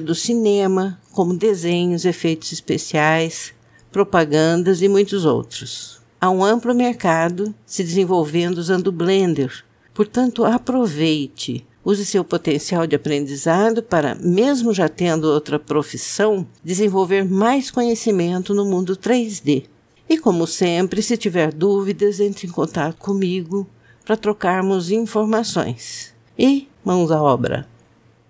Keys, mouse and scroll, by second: 1.0 s, 2.3 s, 2.5 middle click.